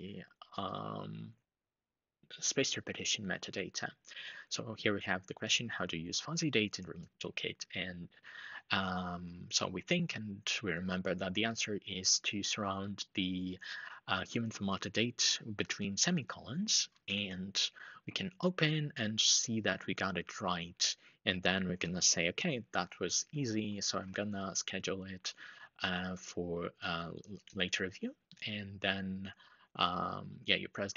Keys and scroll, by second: 16.7 super+Down, 23.4 ctrl+shift+4.